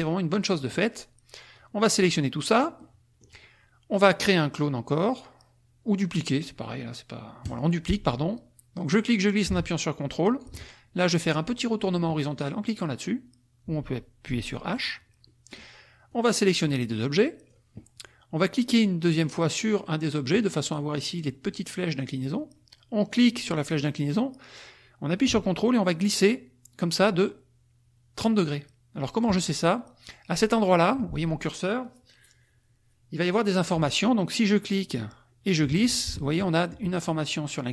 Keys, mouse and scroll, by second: 0.5 click, 1.6-2.7 drag, 2.8 click, 7.5 click, 8.9-10.6 drag, 14.7 click, 15.4 middle click, 16.0-17.7 drag, 20.4 click, 23.1-29.4 drag, 35.0-37.7 drag.